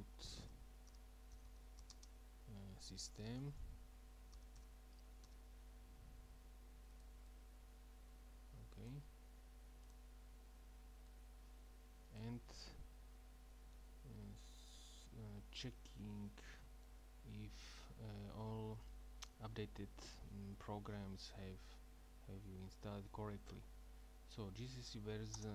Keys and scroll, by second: 0.1-5.3 typing, 13.7 Up, 14.3 Up, 15.5 Down, 25.4 Return.